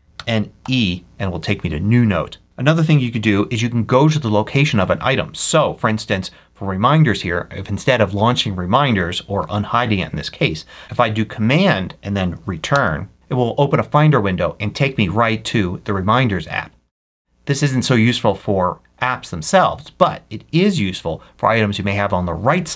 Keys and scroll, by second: 0.0 n, 0.5 e, 3.1 ctrl+F3, 5.6 Left, 12.6 super+Return, 18.2 super+w.